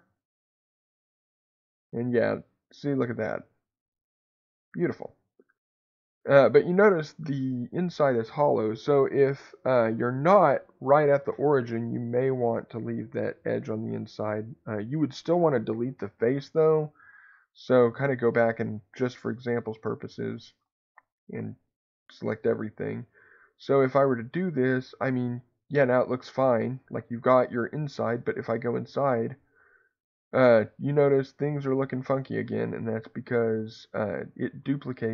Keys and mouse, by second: 1.1-4.9 drag, 5.6 middle click, 19.4-20.4 drag, 20.9 ctrl+z, 21.3 a, 21.8 a, 22.9-26.5 drag, 29.1-31.7 middle drag, 32.9-34.3 middle drag.